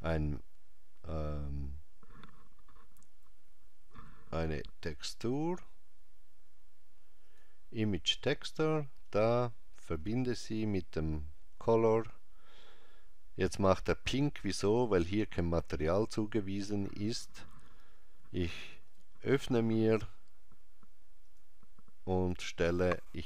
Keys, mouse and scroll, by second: 10.6 click, 18.9 click.